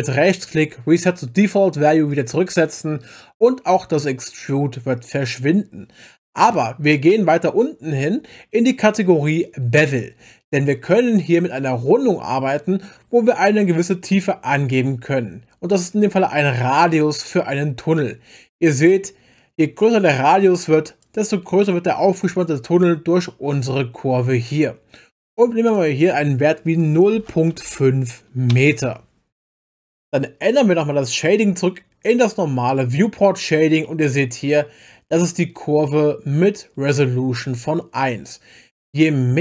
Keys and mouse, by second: 0.0-2.2 right drag, 3.1-4.5 right drag, 15.7-21.0 drag, 25.7-28.5 drag, 32.2 click, 33.8-36.3 middle drag.